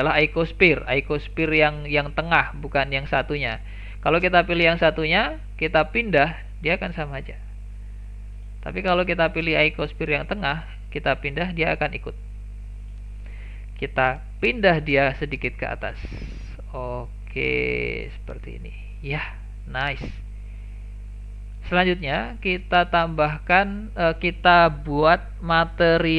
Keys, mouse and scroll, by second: 2.4 click, 3.3 click, 4.2 click, 4.7 click, 6.2 g, 9.8 click, 11.0 g, 14.4 g, 18.4 scroll down 1, 18.6-19.1 middle drag, 19.1-19.4 scroll down 1, 19.4-20.5 shift+middle drag, 20.5-20.9 scroll up 2, 20.9-22.5 middle drag, 22.5 click.